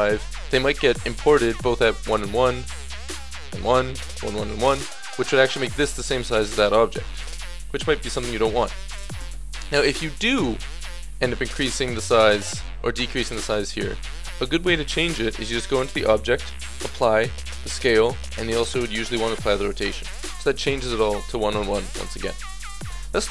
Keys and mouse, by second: 0.1-0.7 drag, 0.7-2.3 middle drag, 4.2-7.8 middle drag, 7.8 right drag, 8.0 middle click, 8.2 right click, 9.2 Delete, 10.7 Tab, 11.4 Tab, 12.1 s, 21.7-23.3 middle drag.